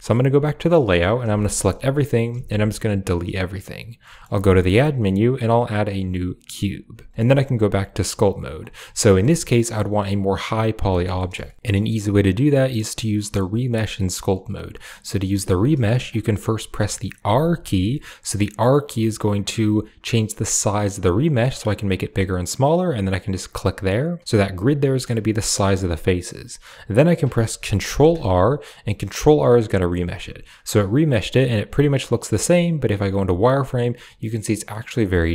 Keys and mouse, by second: 0.1 click, 1.0 a, 1.2 a, 2.2 x, 3.9 click, 4.2 shift+a, 8.0 click, 8.8 shift+middle click, 9.2 middle click, 10.8 shift+click, 11.0 click, 11.3 shift+click, 14.7 click, 15.1 shift+middle click, 17.1 r, 24.7 click, 24.7 middle click, 28.0 ctrl+r, 30.0-31.2 middle drag, 32.1 z, 33.8 middle click, 35.0 z.